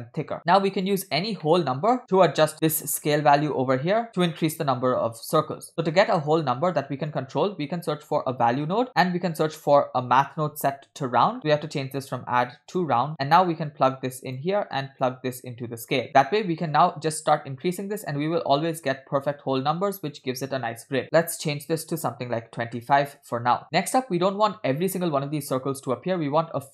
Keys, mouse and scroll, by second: 0.4 middle click, 0.4 scroll down 3, 1.3 scroll down 1, 1.5 middle click, 2.1 scroll down 1, 2.6 scroll down 2, 4.2-4.5 scroll down 2, 5.7 middle click, 5.9-6.2 scroll down 2, 6.1 middle click, 6.6 shift+a, 9.0 shift+a, 11.4-12.9 drag, 11.4 scroll up 2, 13.5-14.5 drag, 15.1-16.1 drag, 16.1 middle click, 16.7-20.2 drag, 21.0-23.2 drag, 23.7 scroll up 4.